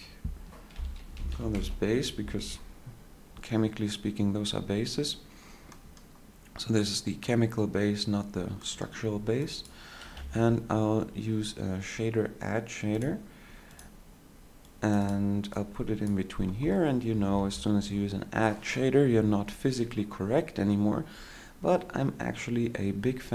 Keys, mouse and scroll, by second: 10.4 shift+a.